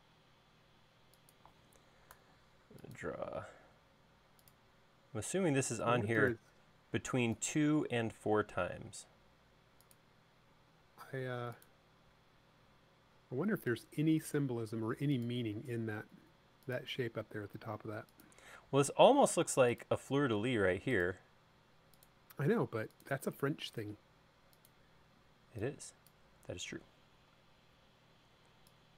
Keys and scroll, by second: 2.2 a, 25.2 e, 26.8 space.